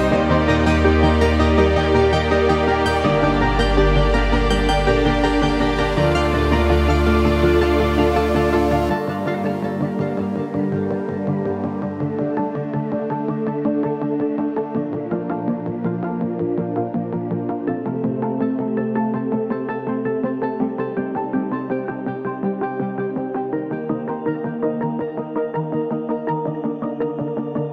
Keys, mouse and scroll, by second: 0.5 click, 2.2-7.5 drag, 11.4-13.4 drag, 15.7 right click, 17.1 click, 19.5-21.1 shift+drag, 21.1-24.1 shift+drag, 27.2 shift+click.